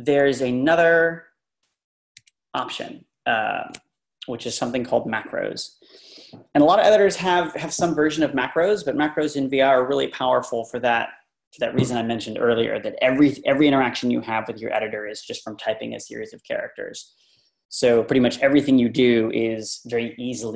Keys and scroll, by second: 2.2 Left.